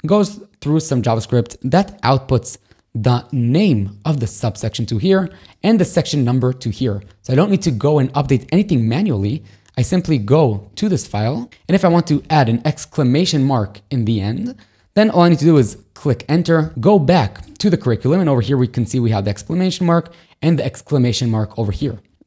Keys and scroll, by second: 16.7 1.